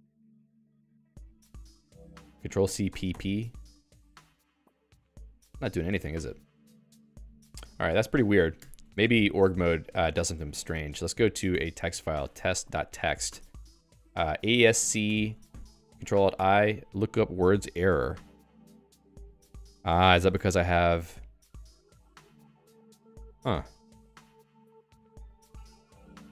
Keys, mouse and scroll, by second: 0.6 alt+x, 0.9 Return, 3.7 BackSpace, 3.9 BackSpace, 6.0 Escape, 6.5 a, 6.8 BackSpace, 8.6 Escape, 8.9 ctrl+s, 10.7 ctrl+f, 12.3-15.6 typing, 13.8 Return, 15.7 ctrl+alt+i, 16.5 ctrl+alt+i, 20.1 Escape, 21.6 Return, 22.3-26.3 typing.